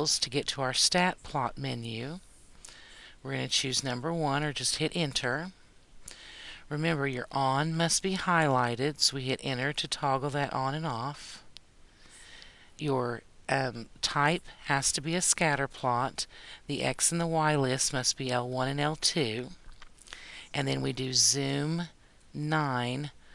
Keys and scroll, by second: 4.7 Return, 9.3 Return, 22.9 9.